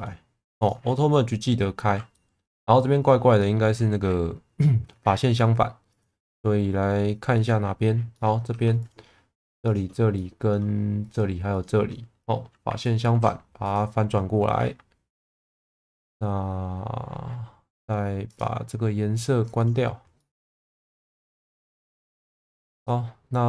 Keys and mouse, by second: 0.6 click, 2.1 middle click, 3.4 shift+middle click, 5.9-7.8 drag, 8.1 middle click, 8.5 3, 10.1 middle click, 11.6 shift+click, 13.0 alt+n, 18.3-19.8 drag, 20.1 middle click, 21.6 click, 21.9 1, 22.4 click, 22.8-23.4 middle drag.